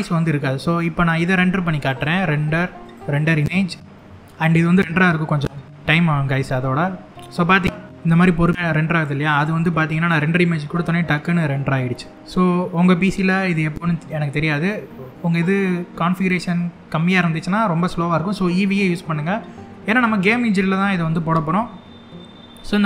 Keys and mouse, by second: 1.7-3.2 drag.